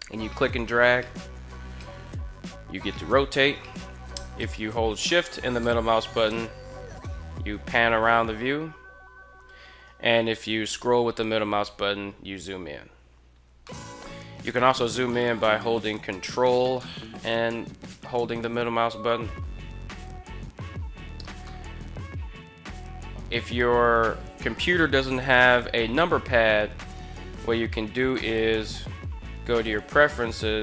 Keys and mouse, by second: 5.3-9.5 shift+middle drag, 13.5 shift+middle drag, 16.5-20.2 ctrl+middle drag, 21.2-22.0 middle drag, 27.9-29.5 drag.